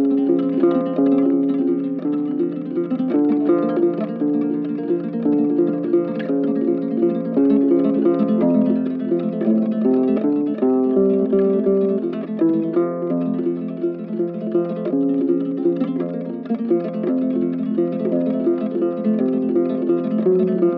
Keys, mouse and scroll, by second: 15.6 Escape.